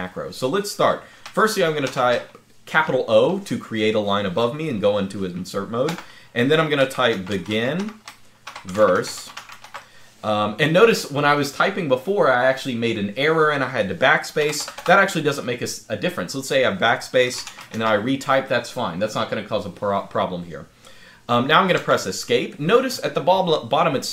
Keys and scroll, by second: 1.6 o, 5.6-9.9 typing, 14.2-14.5 typing, 16.8-18.0 typing, 21.7 Escape.